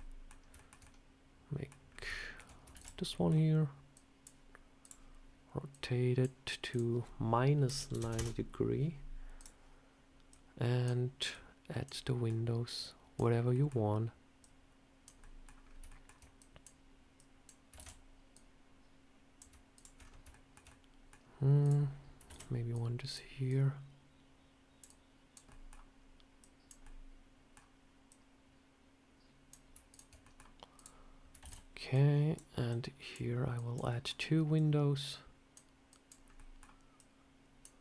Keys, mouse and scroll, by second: 0.5 shift+middle click, 0.7 middle click, 1.8 scroll up 2, 2.1 shift+middle click, 2.4 scroll down 1, 2.6 shift+d, 3.0 middle click, 3.8 click, 4.7 click, 5.6 click, 6.6 click, 9.3 click, 10.2 click, 11.2 click, 11.9 middle click, 12.7 click, 13.4 middle click, 14.3 click, 15.1 middle click, 15.5 scroll up 2, 15.8 shift+middle click, 16.3 click, 17.1 click, 17.7 shift+d, 18.2 click, 19.6 shift+click, 19.7 shift+click, 19.9-20.2 scroll down 3, 20.2 shift+middle click, 20.6 middle click, 21.5 click, 22.2 shift+d, 22.6 click, 23.4 click, 24.7 click, 25.4 middle click, 26.3 click, 26.7 middle click, 28.0 click, 29.8 shift+click, 30.1 middle click, 30.6 click, 31.3 shift+d, 31.8 click, 32.6 click, 32.7 shift+click, 33.4 click, 33.8 middle click, 34.4 click, 35.8 click, 36.1 scroll up 2, 36.2 middle click, 36.8 click.